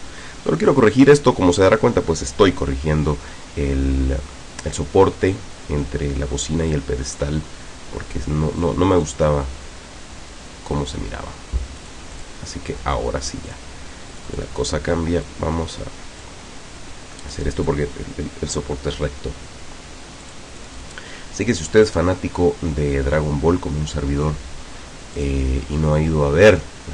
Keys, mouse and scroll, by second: 7.3-8.9 drag, 9.1-11.2 drag, 11.9 click, 13.5 click, 14.1 click, 15.3 click, 17.3-17.9 drag, 20.3 click, 25.2 click.